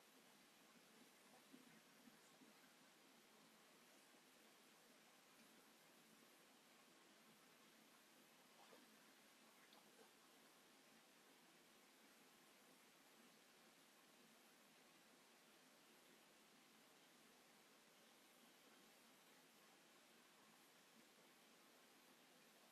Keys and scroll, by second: 5.1 Escape, 8.4 a, 12.3 a.